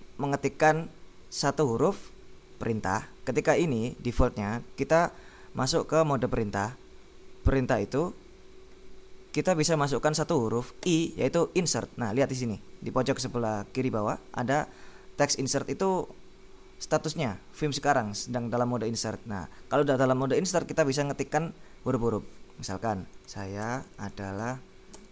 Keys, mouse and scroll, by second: 10.9 i, 23.0-25.1 typing.